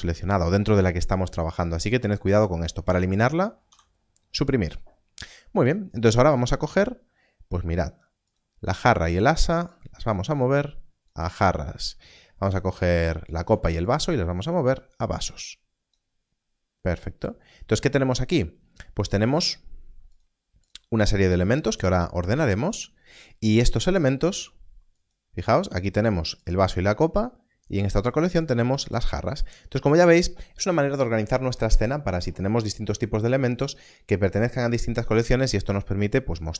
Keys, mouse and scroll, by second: 3.6 click, 4.1 Delete, 7.7 click, 19.0 click, 24.9 z, 25.4 click.